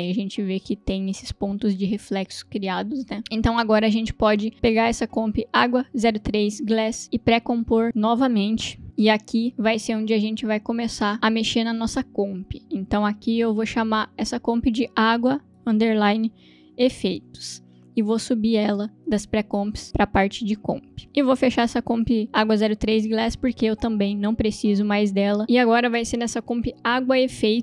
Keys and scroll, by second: 9.5 Return, 16.6-17.7 typing, 19.4 Return.